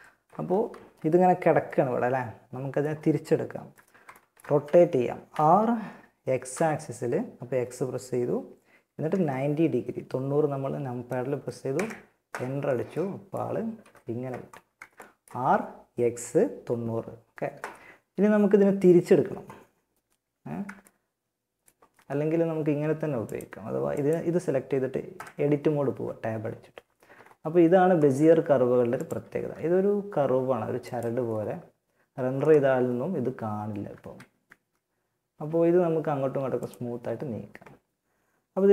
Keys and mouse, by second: 0.9-2.9 middle drag, 4.5 r, 13.0 KP_1, 20.0-24.3 drag, 24.3 Tab, 26.1 a, 26.3-28.1 middle drag, 28.1-30.1 drag, 28.5 g, 30.4 middle click, 30.5 Tab, 32.9 Tab, 33.7 g, 38.1-38.7 right drag.